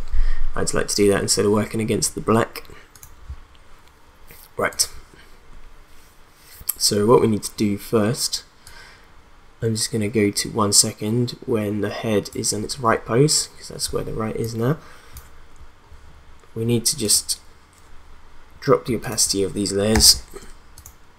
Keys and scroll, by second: 19.9 t.